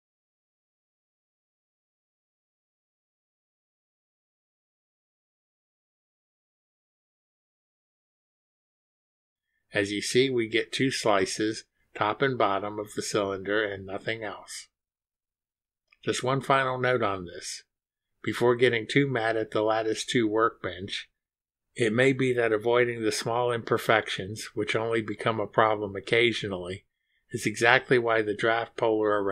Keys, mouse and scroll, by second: 0.2 click, 2.3-2.6 scroll down 1, 4.2 click, 5.2 scroll up 1, 9.0 click, 9.3 space, 10.2 space, 11.1 click, 11.3 space, 12.4 space, 13.6 click, 13.8 space, 16.4-19.7 drag, 20.1 scroll up 1, 20.8 click, 21.6-22.0 scroll up 1, 22.4-22.8 scroll up 1, 25.8 click, 27.7 scroll up 1, 28.2 scroll up 2, 28.8-29.3 scroll up 2.